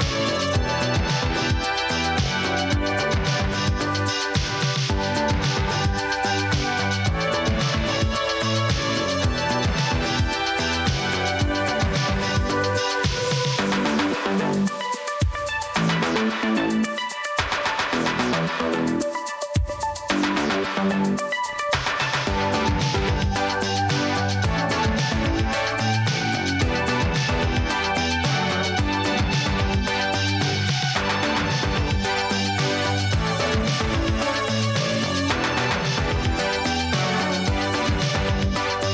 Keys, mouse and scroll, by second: 2.1 space, 3.0 space, 4.5 space, 6.9 space, 11.4 space, 13.1 space, 14.7 space, 15.7 space, 19.4 space, 21.2 space, 21.9 space, 23.1 space, 24.4 click, 25.1 space, 25.6 click, 28.8 space, 30.9 space, 33.2 space.